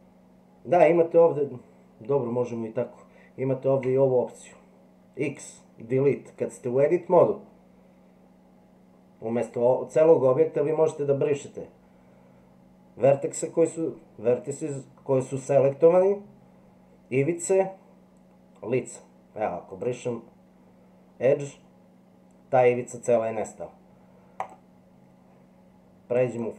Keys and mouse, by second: 3.8 x, 24.4 click, 26.3 click.